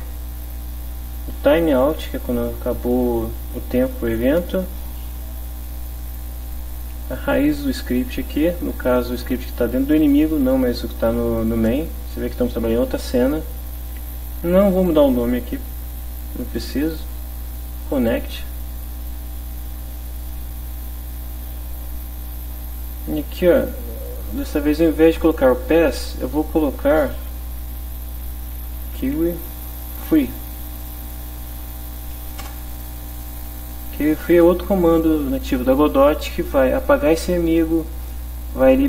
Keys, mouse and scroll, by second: 1.7 click, 5.8 click, 7.3 click, 17.9 click, 22.7-24.5 drag, 27.0 Delete, 28.7 q, 28.8 u, 29.0 e, 32.4 Return, 33.4 Down, 34.0 Up.